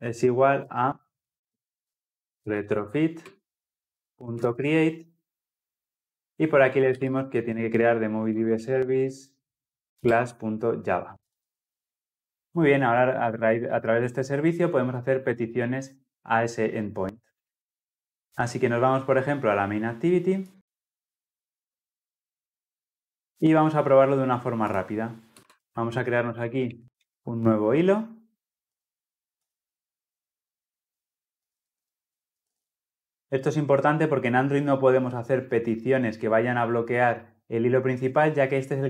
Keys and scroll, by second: 11.1 ctrl+alt+l, 11.2 ctrl+alt+o, 29.3 Return.